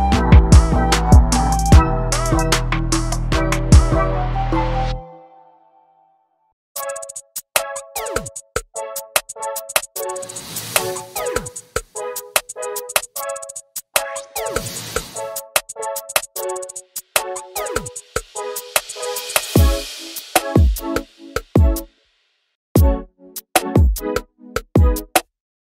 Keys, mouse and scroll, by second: 0.8 scroll down 1, 0.9-2.5 middle drag, 2.5 scroll up 1, 2.6 middle click, 3.3 ctrl+z, 3.6-4.2 scroll down 2, 3.7 alt+a, 4.0 click, 4.2 middle click, 4.4 alt+z, 5.2 ctrl+click, 6.1 ctrl+click, 6.3 scroll up 1, 6.4 middle click, 6.8 alt+z, 6.9 scroll up 1, 7.0 middle click, 7.6 shift+click, 7.8 shift+click, 7.9 middle click, 8.8 /, 9.2 ctrl+space, 9.3-10.0 scroll down 1, 10.0 scroll down 1, 10.2-14.6 middle drag, 14.7 scroll down 2, 14.9-17.6 middle drag, 17.6 click, 17.9 middle click, 18.9 ctrl+click, 19.1 middle click, 19.6 right click, 19.7 scroll down 1, 19.8 scroll up 1, 19.9 Tab, 20.2 scroll down 1, 20.4 ctrl+space, 20.5 scroll up 2, 20.7 middle click, 20.8 click, 21.7 click, 22.0-22.4 scroll up 1, 22.4 KP_Decimal, 22.8 scroll down 6, 23.0-23.6 scroll up 2, 23.6 u, 24.4 shift+middle click, 25.0 scroll down 1, 25.1 shift+middle click, 25.2 scroll up 1, 25.3 middle click.